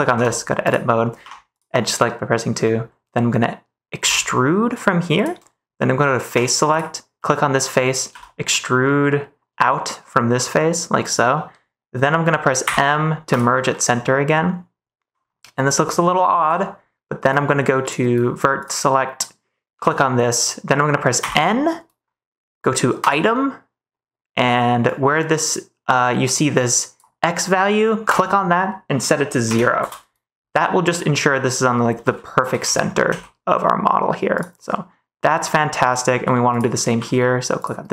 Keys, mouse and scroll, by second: 0.0 Tab, 0.6 click, 1.1 2, 3.9 e, 6.2 3, 7.1 middle click, 8.0 e, 10.9 click, 12.5 m, 13.9-15.2 middle drag, 15.6 shift+middle click, 17.8 click, 18.7 middle click, 19.6 g, 21.1 n, 22.9 click, 24.9-26.9 drag, 28.0-29.8 drag, 30.5 middle click, 31.8 n, 32.3 g, 32.5 x, 33.0 z, 34.6 middle click, 34.7 click, 35.4 middle click, 36.9 n, 37.5 click.